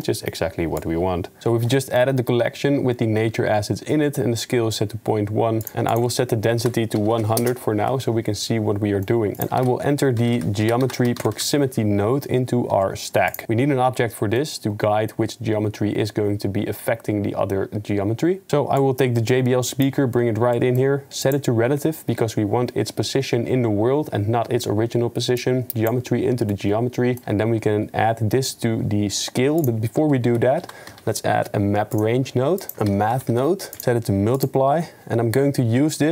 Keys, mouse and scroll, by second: 0.1 click, 0.8 right click.